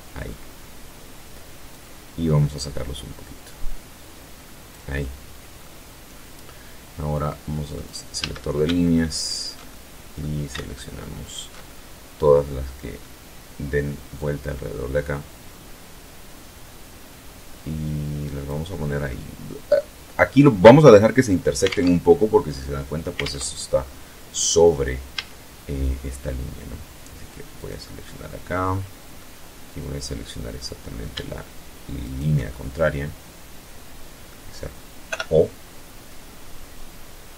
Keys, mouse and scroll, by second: 0.6-3.8 drag, 3.8-4.7 middle drag, 5.1 scroll up 1, 6.6 click, 7.1 a, 8.1 alt+shift+right click, 8.6-9.3 alt+shift+middle drag, 10.1 alt+shift+right click, 10.6-11.5 alt+shift+middle drag, 13.1-17.5 drag, 17.7 scroll down 1, 18.0-18.9 middle drag, 19.2 middle click, 20.6 alt+Tab, 22.1 alt+Tab, 23.2-23.8 middle drag, 24.0 a, 26.5 right click, 26.9 middle click, 28.0-29.9 middle drag, 30.9 shift+right click, 31.4-33.3 shift+middle drag, 33.9 o, 34.9-36.5 drag, 36.5-36.9 scroll up 2, 37.1 scroll up 2.